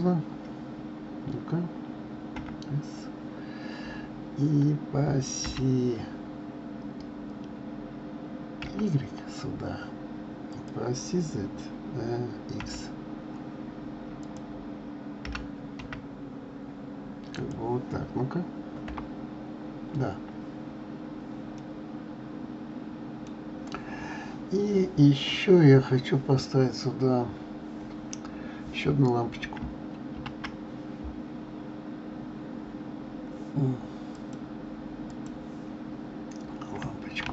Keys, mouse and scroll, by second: 2.5 KP_7, 5.6 g, 15.5 g, 19.0 KP_0, 21.7-24.7 middle drag, 30.3 shift+a, 34.2-37.3 drag.